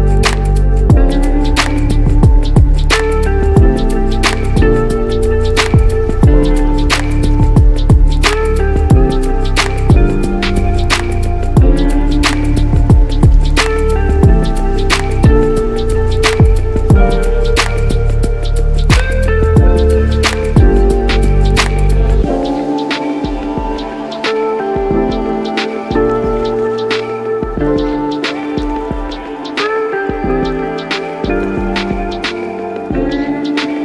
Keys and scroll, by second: 5.5 [, 5.8 [, 13.6 ctrl+t, 19.6 ctrl+g, 20.3-20.9 typing, 21.0 Return, 23.9 ctrl+g, 25.5 Caps_Lock, 25.9-27.1 typing, 26.5 Caps_Lock, 27.1 Return.